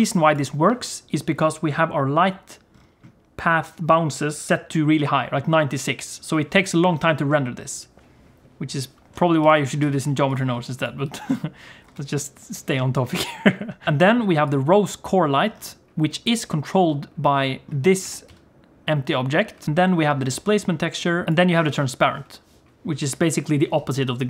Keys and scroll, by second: 9.4 alt+a, 9.8 ctrl+s, 11.9 ctrl+s, 18.1 g.